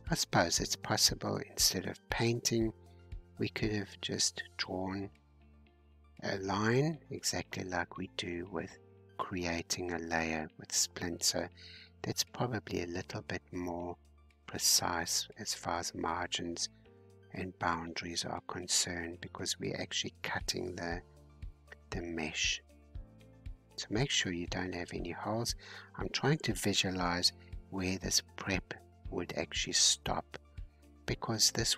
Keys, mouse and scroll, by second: 3.5-5.5 middle drag, 5.5-6.4 scroll down 1, 6.4-7.1 scroll up 2, 7.1-13.9 drag, 13.9-16.3 middle drag, 16.3-26.5 drag, 26.5-28.2 middle drag, 28.2-31.5 drag.